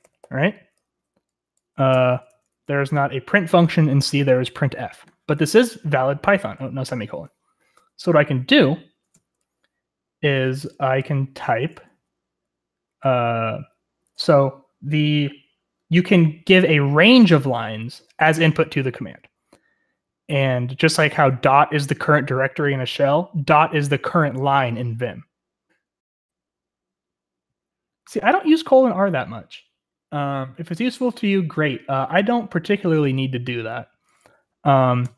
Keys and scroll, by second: 0.0-0.7 typing, 1.9-2.8 typing, 6.5 x.